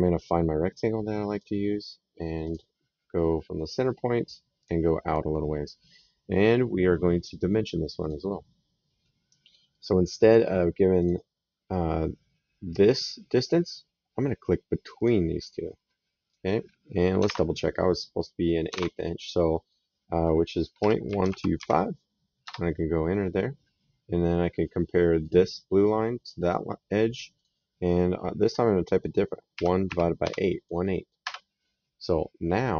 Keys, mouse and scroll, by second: 1.1 click, 2.2 click, 4.4 click, 7.8 click, 10.8 click, 14.8 click, 16.1 click, 17.4 Tab, 18.6 alt+Tab, 20.6 KP_Decimal, 20.9 KP_1, 21.0 KP_2, 22.2 Return, 25.0 click, 26.2 click, 29.4 KP_1, 29.7 KP_Divide, 30.1 KP_8, 31.0 Return.